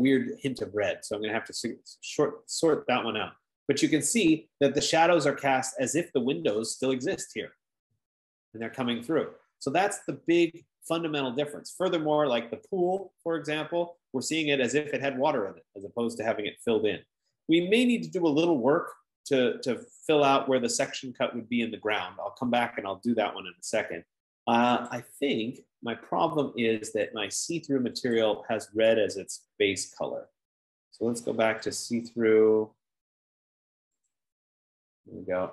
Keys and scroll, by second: 26.9 F15.